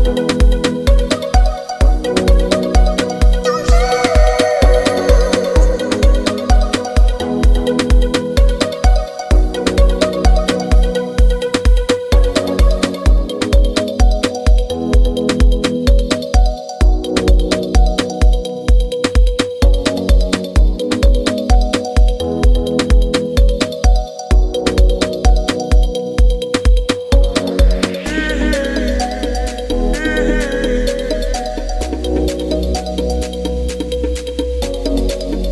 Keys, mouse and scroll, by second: 5.1-29.6 drag, 35.4 click.